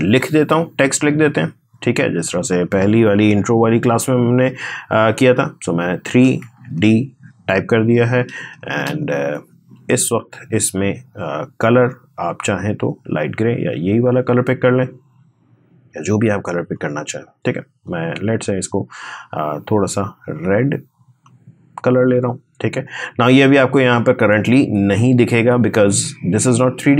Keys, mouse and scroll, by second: 1.3 click, 3.2 3, 6.1 shift+3, 6.5 shift+d, 11.7 click, 14.4-21.0 drag.